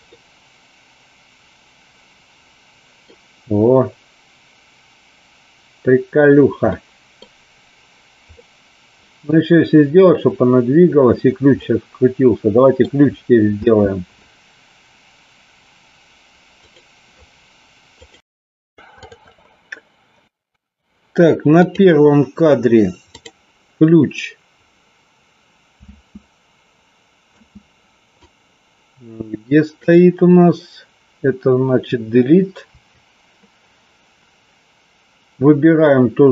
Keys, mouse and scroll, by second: 0.0-3.0 middle drag, 6.7-7.2 middle drag, 8.3-9.3 middle drag, 11.5-12.8 middle drag, 13.5 space, 21.8 click, 23.2 click, 26.0 space, 28.4-30.0 drag, 32.8 Delete.